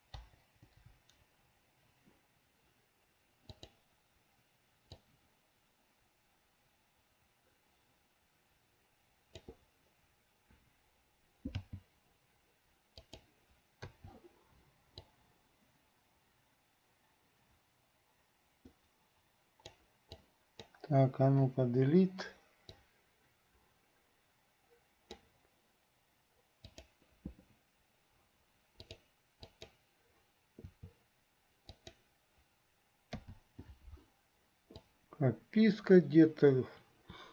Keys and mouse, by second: 0.5 Delete, 3.7-9.7 drag, 14.2 i, 15.3-20.0 drag, 20.4 click, 21.6 Delete, 23.0-25.4 drag, 26.7 click, 29.0 click, 29.7 click, 30.8 r, 33.3 i, 35.0-37.3 drag.